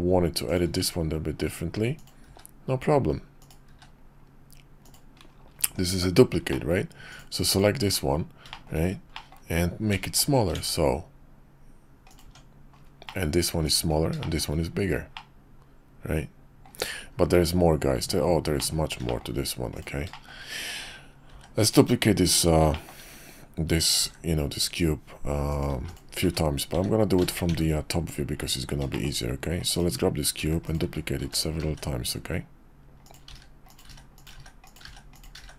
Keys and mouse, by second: 4.6-7.2 middle drag, 7.5 click, 7.8 Tab, 8.5 shift+middle click, 9.1 middle click, 9.9 s, 12.2 Tab, 13.0 middle click, 13.6 click, 14.2 shift+drag, 15.1-16.6 middle drag, 18.6 middle click, 19.1 shift+middle click, 19.7 click, 20.1 shift+drag, 21.3 shift+d, 22.7 shift+drag, 24.0 shift+d, 25.7 x, 27.4 `, 28.5 KP_5, 28.9 shift+drag, 29.7 click, 30.4 shift+d, 30.8 shift+d, 31.8 shift+d, 33.4-35.5 typing.